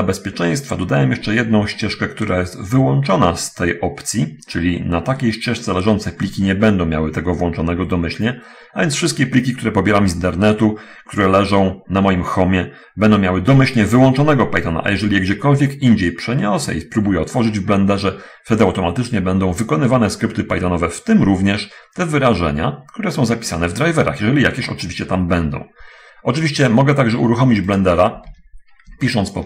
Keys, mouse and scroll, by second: 28.2 alt+F1.